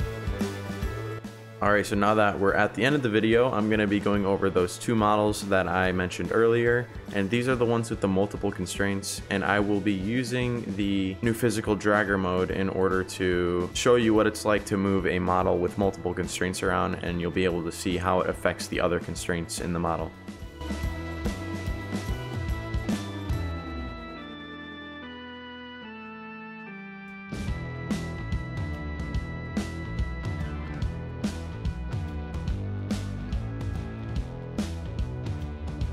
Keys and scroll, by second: 2.5-4.6 typing, 4.7 Pause, 18.9 s, 24.0 w, 24.7 s, 29.0-29.8 typing, 33.1 a, 34.8 d.